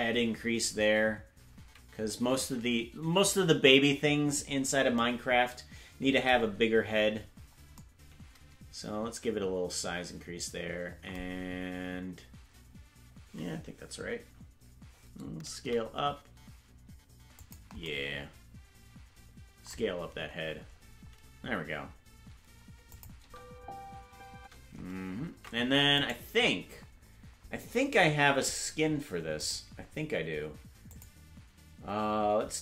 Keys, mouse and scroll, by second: 7.1-7.7 scroll down 3, 7.8 scroll down 2, 17.8 s, 22.9 click, 23.2 space, 25.3 ctrl+Tab, 25.3 space, 26.1 right click, 29.4 click, 30.9 click.